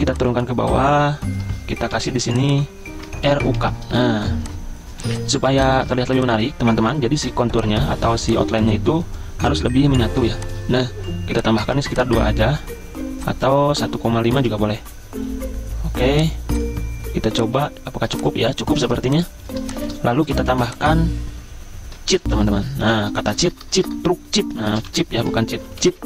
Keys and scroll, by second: 1.9 t, 3.0-6.1 typing, 13.8-16.4 typing, 18.9 z, 19.8 BackSpace, 23.6-26.0 typing.